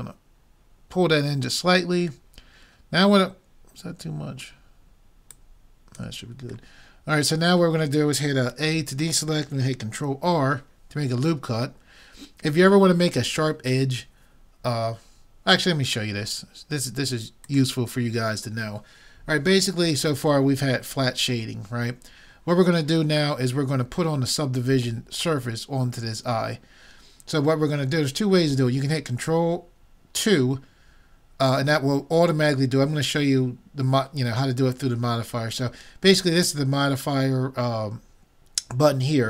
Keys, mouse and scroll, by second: 2.4-4.2 middle drag, 5.3-7.0 drag, 7.0 middle click, 8.7 a, 10.3 ctrl+r.